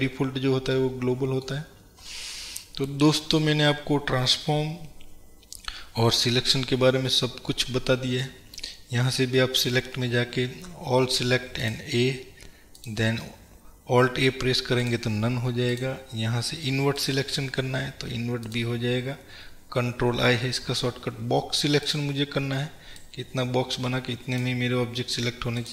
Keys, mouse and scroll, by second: 1.9-2.3 scroll down 2, 9.7-25.7 drag.